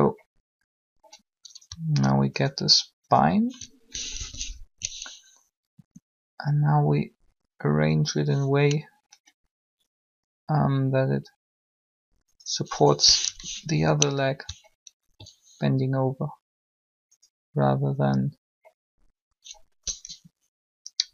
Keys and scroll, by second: 3.9 shift+1, 5.7 r, 13.2 7, 20.0 7.